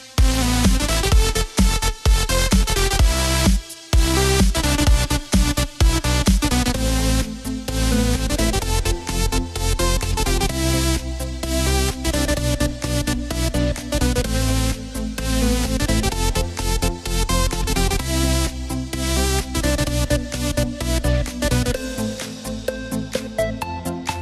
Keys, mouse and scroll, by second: 0.3-1.4 drag, 1.4 KP_Decimal, 2.5-3.8 scroll down 15, 5.6-8.7 alt+drag, 8.7 g, 12.9-19.1 shift+drag, 19.1 g.